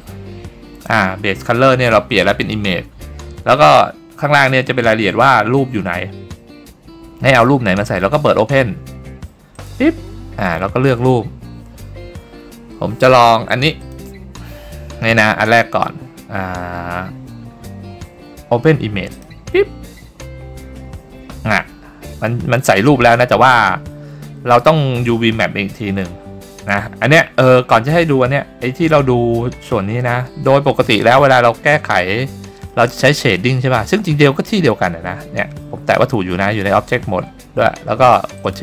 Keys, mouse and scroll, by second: 9.7 click.